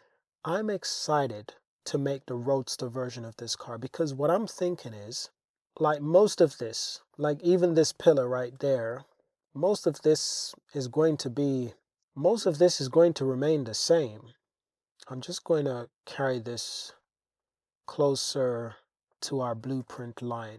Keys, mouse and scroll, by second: 2.6 Tab, 3.9 Tab, 5.2 Tab, 8.7 Tab, 9.1 shift+click, 10.0-10.3 shift+drag, 11.3-11.7 drag, 11.7 middle click, 12.9 shift+drag, 13.1 middle click, 13.5 Tab, 14.0 click, 15.1 g, 15.2 g, 16.9 click, 18.1 g, 18.4 g, 19.1 click, 19.5 click, 19.9 g, 20.0 g.